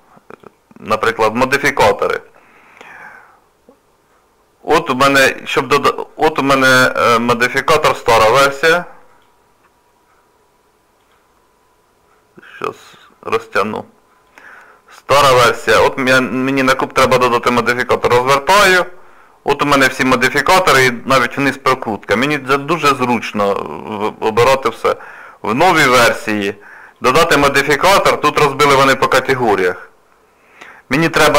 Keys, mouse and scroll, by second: 8.5 click, 11.1 click, 12.6 click, 14.3 click, 15.8 click, 17.8 click.